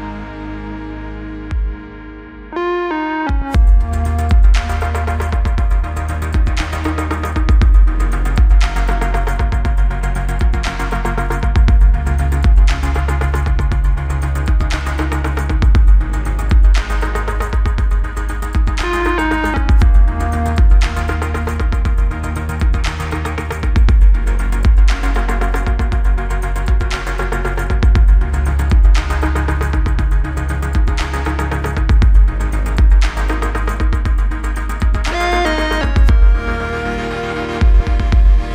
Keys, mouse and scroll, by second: 0.6 g, 2.4-4.3 click, 5.9 click, 11.0 Return, 12.0 click, 13.0 Return, 14.3 click, 15.6 Return, 17.6 click, 19.7 Return, 23.1 click, 23.9 b, 25.2-26.9 click, 28.7 click, 31.9 click, 33.7 click, 34.6 Return, 35.6 click, 36.6 Return, 38.2 click.